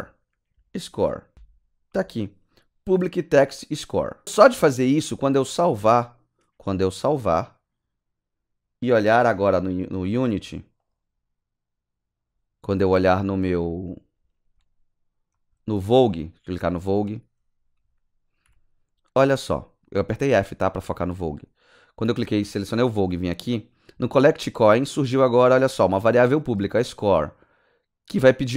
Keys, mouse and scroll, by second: 0.0-1.3 typing, 5.6 ctrl+;, 5.8 ctrl+s, 10.8 click, 14.0 scroll down 6, 14.6 click, 15.3-15.9 scroll up 6, 16.2 click, 16.7 click, 17.3-18.3 scroll down 9, 18.4 f, 22.3 click.